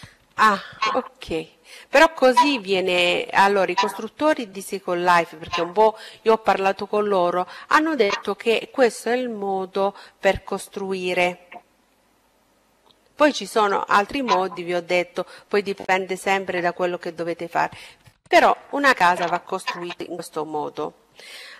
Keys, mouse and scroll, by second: 0.0-1.8 right drag.